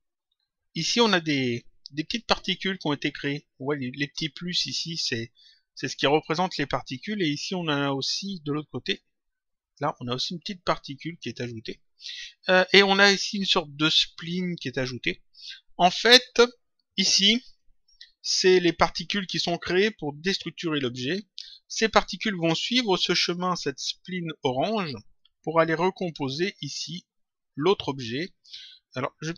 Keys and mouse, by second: 8.8 click.